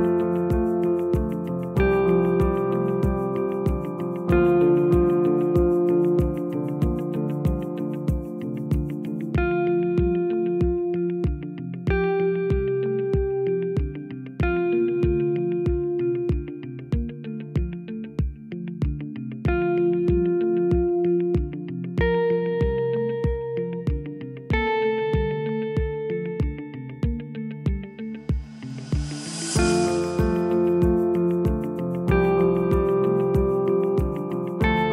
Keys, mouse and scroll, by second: 1.5 click, 2.3 Delete, 8.9 click, 9.9 Delete, 12.8 click, 16.3 click, 18.1 Tab, 19.1-22.1 drag, 22.6 click, 23.3-26.4 drag, 27.7-28.5 drag, 30.0-33.0 drag, 33.3-34.9 drag.